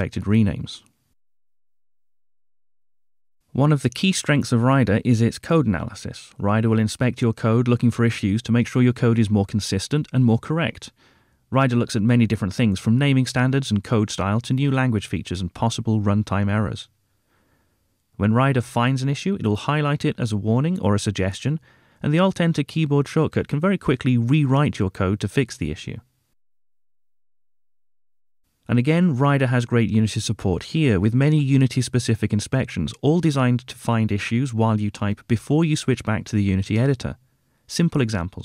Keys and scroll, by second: 6.5 alt+Return, 13.3 alt+Return, 17.3 ctrl+Tab, 19.7 alt+Return, 25.1 alt+Return, 30.3 alt+Return, 33.1 Return, 34.4 ctrl+Tab, 37.7 Tab.